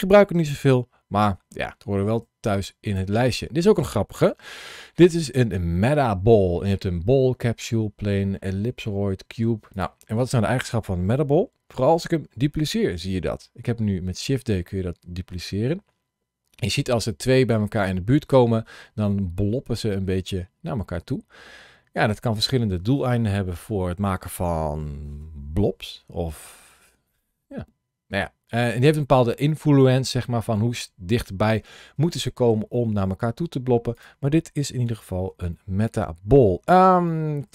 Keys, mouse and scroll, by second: 0.7-1.3 scroll down 2, 1.3 shift+middle click, 2.7 click, 3.3-4.0 scroll down 1, 4.1 shift+a, 12.7 shift+d, 33.8 click, 34.7-35.0 scroll down 2, 35.3 shift+middle click, 36.3-36.6 scroll up 2, 36.9 shift+middle click.